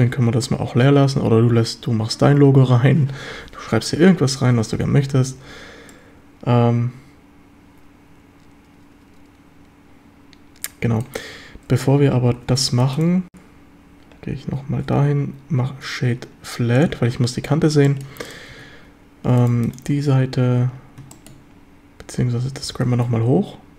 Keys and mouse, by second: 5.4 z, 5.9 middle drag, 6.2-11.1 drag, 12.4 Tab, 12.7 shift+drag, 15.0 q, 17.8 shift+click, 18.5 Tab, 21.1 shift+drag, 22.6 g, 22.8 z.